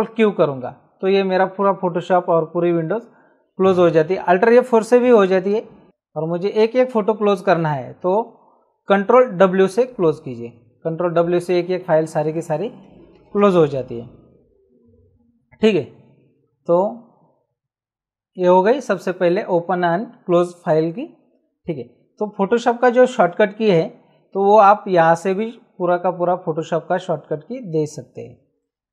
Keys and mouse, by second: 0.1 ctrl+q, 5.4 click, 9.6 ctrl+w, 25.2 click.